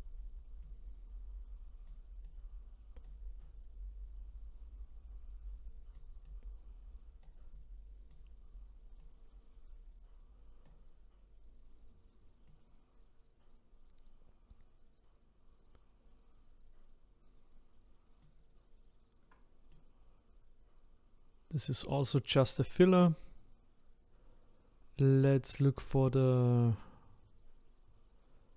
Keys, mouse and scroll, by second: 0.6-2.3 drag, 2.3-3.4 right drag, 3.4-6.3 drag, 6.3-7.5 right drag, 7.5-9.0 drag, 9.0-12.4 right drag, 12.4-15.5 drag, 19.7-28.5 middle drag.